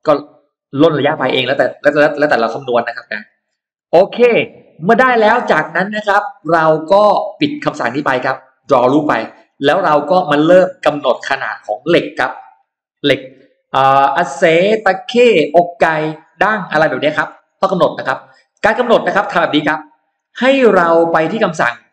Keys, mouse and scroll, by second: 1.3 e, 1.4 click, 1.9 scroll down 1, 2.3 middle click, 2.5-3.6 scroll down 2, 3.6 middle click, 4.1 space, 4.5-4.8 scroll up 1, 4.9 middle click, 5.3-5.6 scroll down 1, 8.4 click, 9.3 click, 9.7-10.9 middle drag, 11.1-11.4 scroll down 1, 12.5-12.8 scroll up 1, 12.8 middle click, 15.7-16.0 scroll down 1, 16.2 middle click, 16.6 scroll down 1, 17.1-17.4 scroll up 1, 17.2 middle click, 17.9-18.3 scroll up 1, 18.0 middle click, 18.4 scroll down 1, 19.9 click.